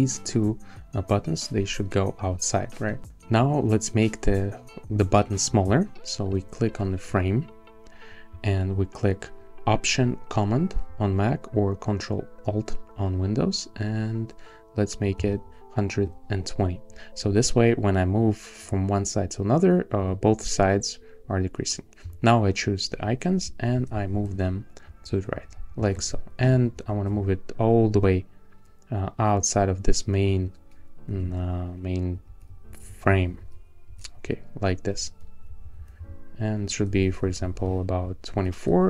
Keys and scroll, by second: 23.4 shift+Left, 25.3 shift+Left, 26.7 shift+Right, 31.3 shift+Right, 35.2 Left, 36.9 alt+Left, 38.3 alt+Right.